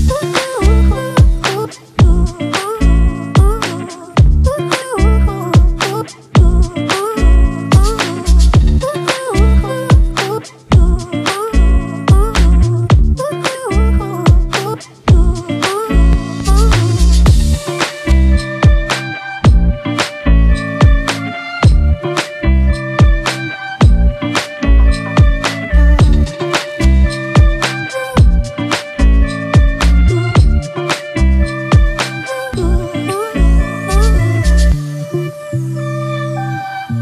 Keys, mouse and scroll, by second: 20.0 alt+click, 24.1 double click, 29.1 double click, 32.8 right click, 33.8 double click.